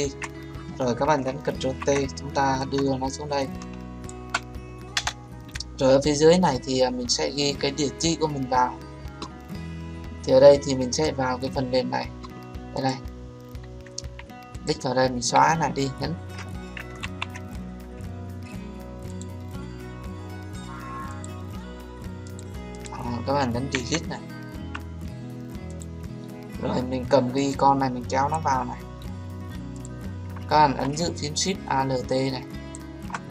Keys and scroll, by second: 1.5 ctrl+t, 4.9 Return, 15.3 Delete, 17.0 ctrl+z, 23.7 Delete.